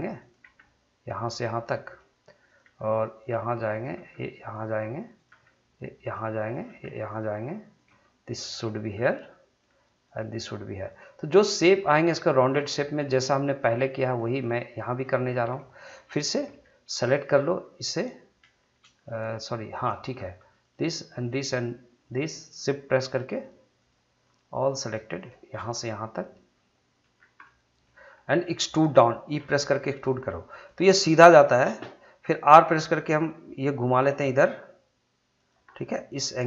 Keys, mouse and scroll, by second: 0.2 click, 0.4 g, 1.3 click, 1.7 middle click, 2.4 click, 2.6 g, 3.2 click, 3.9 g, 4.5 click, 5.3 g, 6.0 click, 6.6 g, 7.1 click, 7.9 g, 8.5 click, 8.9 scroll down 1, 9.0 middle click, 10.0 click, 10.2 g, 10.9 click, 11.6 g, 12.0 click, 12.6 g, 13.1 click, 13.6 middle click, 14.4 middle click, 16.4 3, 17.7 click, 19.0 middle click, 20.6 shift+click, 25.5 shift+scroll down 1, 25.8-27.1 middle drag, 27.1 scroll down 1, 27.4 middle click, 28.1 scroll down 1, 28.3 middle click, 29.4 e, 30.6 click, 32.4 r, 35.4 click, 35.7-36.4 middle drag.